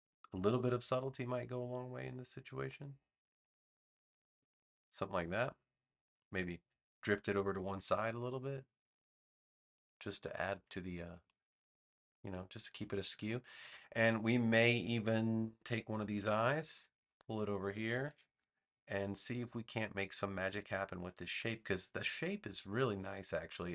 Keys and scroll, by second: 16.1 super+c, 18.0 super+v.